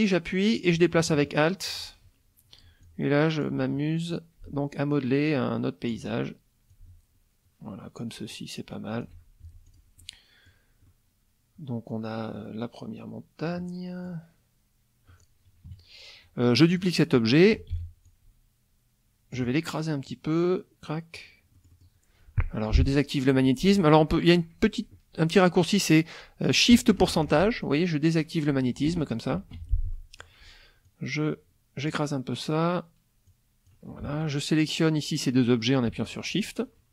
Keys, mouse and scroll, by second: 2.9 alt+click, 4.1-6.1 alt+drag, 6.7-9.2 alt+drag, 9.4 alt+F1, 9.7 alt+click, 10.0 alt+middle click, 10.9-12.5 middle drag, 13.6 middle click, 15.7 KP_Subtract, 16.7 click, 17.7 ctrl+d, 18.1-19.5 ctrl+drag, 20.1-21.3 drag, 21.5 middle click, 29.9 shift+middle click, 30.8-32.1 drag, 33.3 click, 36.0 shift+click.